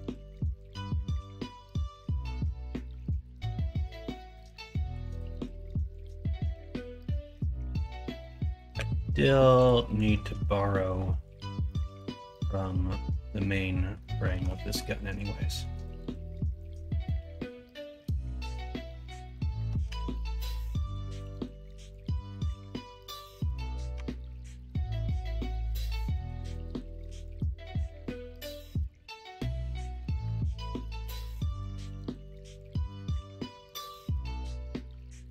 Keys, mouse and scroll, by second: 1.9-3.1 drag, 7.8 l, 8.7 x, 11.6 middle click, 12.4 middle click, 13.9 middle click, 14.3 alt+z, 14.7 middle click, 15.6 middle click, 16.6 middle click, 17.0-18.4 middle drag, 19.8 Tab, 21.7 middle click, 22.4 middle drag, 23.1 middle click, 23.9 Tab, 26.6 KP_1, 27.0 KP_3, 34.2 middle click.